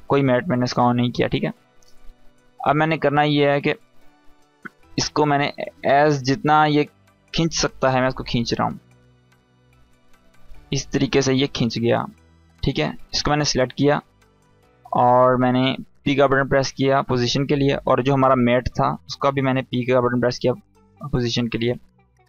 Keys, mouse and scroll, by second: 2.4 scroll down 1, 2.8 space, 2.9-3.6 click, 3.3 space, 3.5 scroll up 1, 5.2-6.5 click, 6.3 space, 6.5 click, 6.8-7.1 space, 7.7-8.6 click, 8.6-9.1 scroll down 1, 9.1 space, 9.1-9.8 click, 9.5 space, 12.0 click, 15.7 p, 17.4 click, 19.2 p.